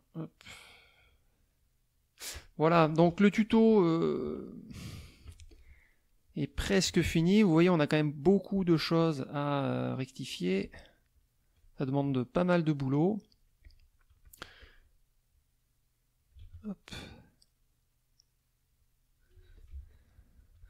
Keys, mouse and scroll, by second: 0.3 click, 1.6 click, 2.7 KP_Subtract, 4.1 F1, 4.4 middle click, 5.2 z, 5.5 click, 5.9 middle click, 6.4 middle click, 6.8 F2, 9.0 click, 9.9 shift+click, 10.4 shift+click, 11.1 shift+click, 12.3 shift+click, 12.9 shift+click, 13.6 shift+click, 14.2 shift+click, 14.6 shift+click, 15.3-16.5 drag, 16.4 ctrl+z, 17.1-18.9 drag, 19.4 z, 19.5 click, 20.1 right click, 20.4 F2.